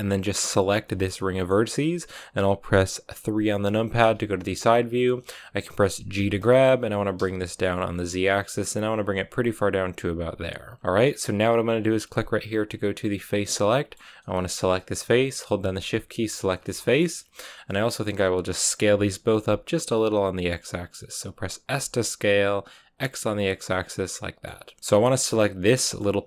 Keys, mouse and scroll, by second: 0.5 alt+right click, 0.7-3.9 middle drag, 3.9 KP_3, 6.0 g, 10.7-13.1 middle drag, 13.1 click, 13.5-14.7 middle drag, 14.7-16.4 right drag, 16.4 scroll down 1, 16.6-18.8 middle drag, 18.8 s, 21.6 s, 23.6-25.5 middle drag, 25.5 right click, 25.7-26.2 middle drag.